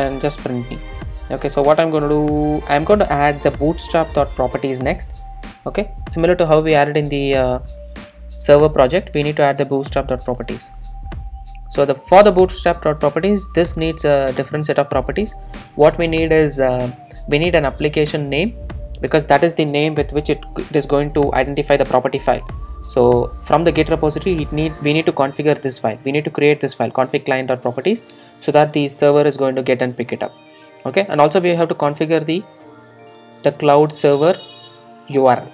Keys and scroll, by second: 14.4 Return, 17.7 Return, 17.7 ctrl+shift+super+F12.